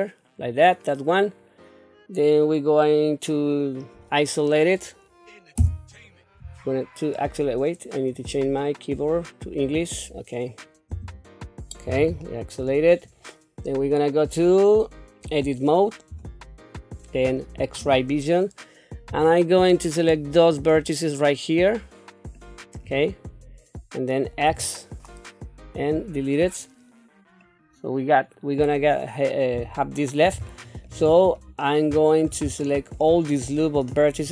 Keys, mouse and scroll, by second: 12.2 shift+middle click, 16.1 Tab, 17.8 q, 20.5 click, 20.7-22.8 drag, 24.5 x, 27.4-28.7 middle drag, 29.5 q, 30.5 shift+middle click, 31.1 scroll up 1, 31.6 shift+middle click, 32.6 shift+middle click.